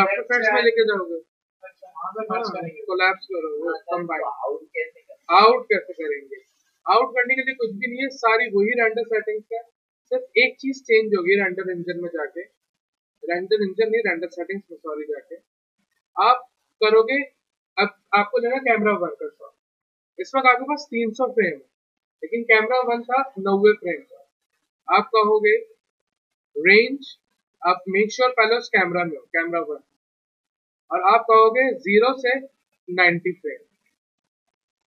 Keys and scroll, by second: 28.4 c, 33.5-34.4 typing.